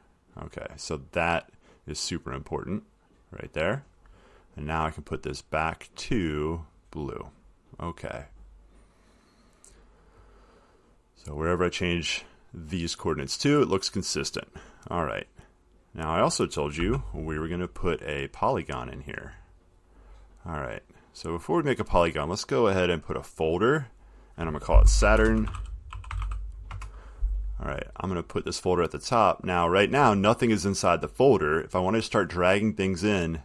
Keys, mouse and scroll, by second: 4.0 click, 6.3 click, 7.0 click, 8.1 click, 13.3 click, 14.0 click, 16.3 click, 17.0 0, 17.8 click, 18.8 click, 21.8 click, 23.7 click, 25.0-27.3 typing, 29.6 click.